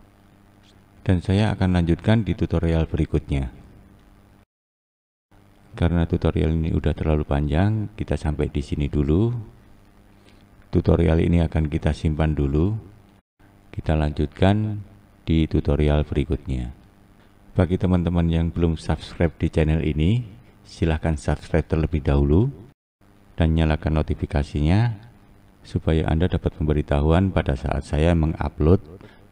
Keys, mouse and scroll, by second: 0.1 click, 0.4-1.1 scroll down 4, 1.1-2.0 scroll up 3, 2.9 click, 3.8 click, 5.8 click, 6.3-6.9 scroll down 1, 7.5-9.2 scroll down 3, 9.2 scroll up 2, 23.1 click.